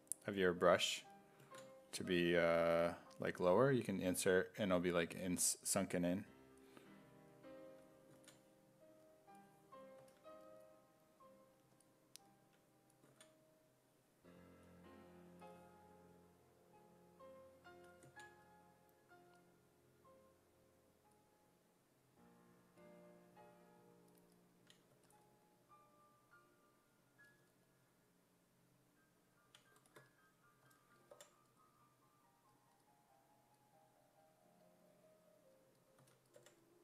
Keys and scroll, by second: 10.0 s, 13.2 z, 30.7 s, 31.2 5, 36.0 s, 36.4 5.